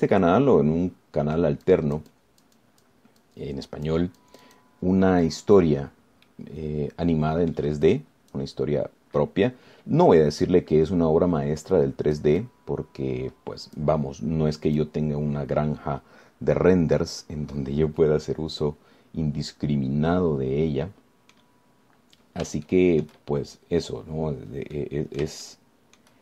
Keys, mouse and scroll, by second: 0.5 click, 1.4-2.8 middle drag, 2.9-4.3 drag, 4.5 click, 5.4 click, 6.5 click, 7.1-7.5 scroll down 2, 7.5-8.9 middle drag, 9.1 click, 11.7-13.6 drag, 16.0-18.6 drag, 18.7-22.7 drag, 23.9 shift+click, 26.0 middle click.